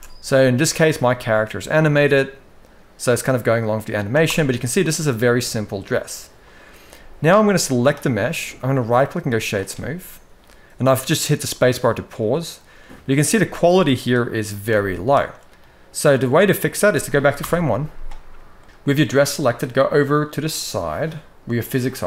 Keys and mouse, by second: 4.0 space, 4.3-4.7 middle drag, 5.0-6.6 middle drag, 7.0 middle click, 8.5-9.2 right drag, 11.2-12.2 middle drag, 12.6-12.9 middle drag, 13.4-14.2 middle drag, 14.4-15.0 middle drag, 16.1 middle click, 17.1 shift+Left.